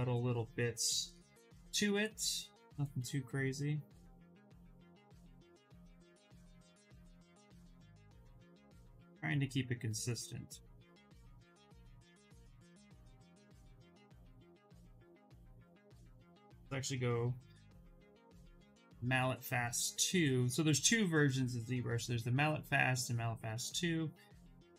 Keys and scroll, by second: 1.2 s, 4.4 ctrl+z, 14.3 s.